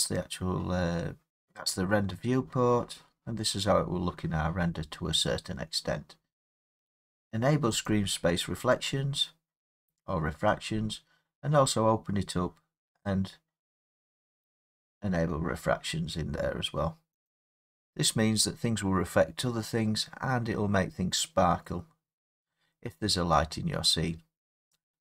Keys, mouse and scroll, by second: 7.9 click, 10.5 click, 14.6 click, 17.3 click, 23.4 scroll, 24.3-24.6 scroll.